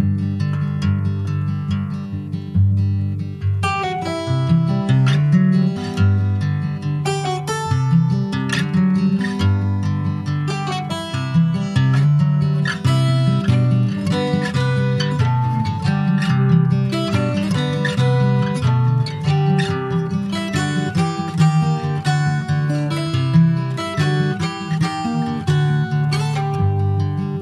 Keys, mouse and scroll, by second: 0.1 click, 0.7 ctrl+a, 1.7 middle click, 2.1 Tab, 2.7 shift+middle click, 2.9-3.7 scroll up 2, 3.2 middle click, 3.7 ctrl+r, 5.5 ctrl+r, 6.9 ctrl+b, 10.1 Tab, 10.3 click, 10.7 ctrl+s, 10.9 click, 11.3 ctrl+a, 12.4 click, 14.9 shift+1, 15.5 click, 16.0 ctrl+1, 16.4 click, 16.8 click, 17.3 ctrl+1, 18.0 shift+1, 18.4 click, 18.7-19.2 scroll down 4, 19.5 ctrl+s, 19.6 click, 21.2 click, 21.5 scroll up 1, 21.8 click, 22.1 click, 22.9 /, 23.4-24.3 scroll down 4, 24.3 ctrl+s, 25.7 alt+h, 26.3-26.8 scroll down 10, 27.0 middle click.